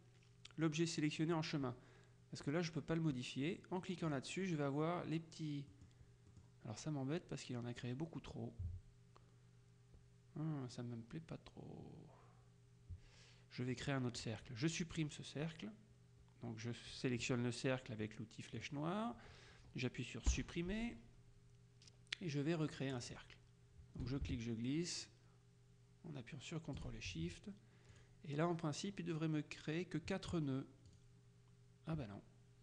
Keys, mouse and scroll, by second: 4.1 click, 5.8 click, 13.8 click, 18.7 click, 20.5 Delete, 23.1 click, 24.2-27.4 ctrl+shift+drag, 28.0 click, 31.0 click.